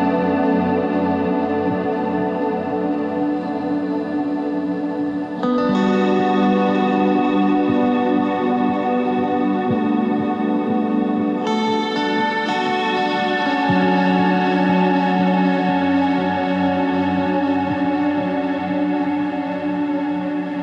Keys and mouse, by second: 0.2 z, 0.4 c, 3.4 r, 4.5 z, 6.9 Tab, 9.2 Tab, 10.1 right click, 11.8 KP_1, 12.1 z, 13.3 c, 14.8 ctrl+z, 15.8 ctrl+Tab, 17.0 c, 19.3 s.